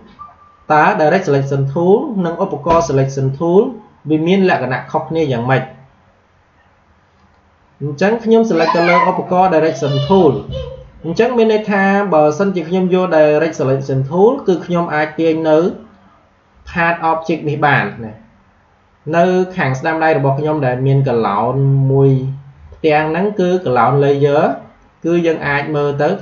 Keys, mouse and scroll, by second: 7.1 click, 12.3-19.9 drag.